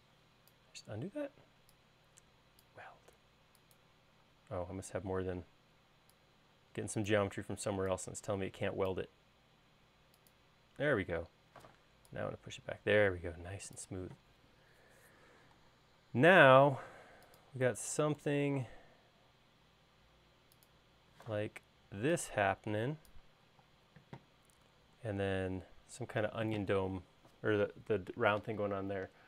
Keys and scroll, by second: 12.2 p, 16.1 l, 21.8 p, 24.2 space.